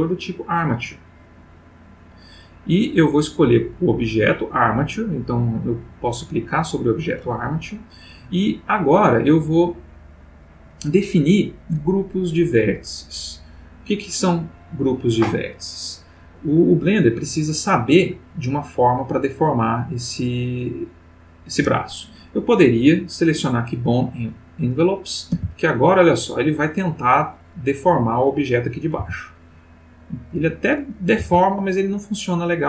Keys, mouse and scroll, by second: 1.4 click, 4.3 click, 6.3 click, 23.4 click, 24.7 click, 25.3 r, 27.9 Escape, 28.5 click, 29.0 r, 30.4 Escape, 31.0 click, 31.2 r.